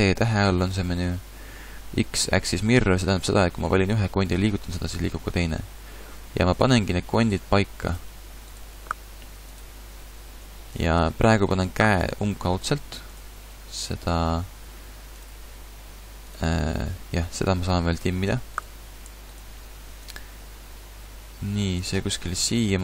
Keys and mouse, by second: 0.5 t, 2.6 t, 4.3 g, 7.2-10.4 drag, 7.4 g, 8.8 g, 10.0-13.5 typing, 12.6 click, 14.6 s, 15.3 g, 22.7 a.